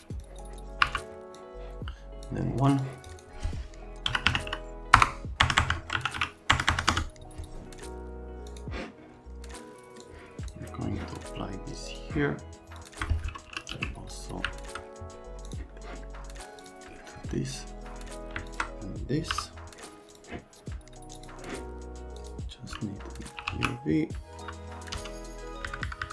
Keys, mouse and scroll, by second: 0.2 click, 0.8 Delete, 1.3 click, 2.7 click, 3.1 click, 4.0-6.7 typing, 5.7 Tab, 6.9 KP_Enter, 8.4 click, 10.0 click, 11.9 click, 12.7 click, 13.4 e, 14.3 middle click, 17.2 middle click, 18.4 click, 19.3 m, 20.1 click, 21.1 click, 22.1 click, 23.1-24.9 typing, 25.6 Down, 25.8 Down, 26.0 Down.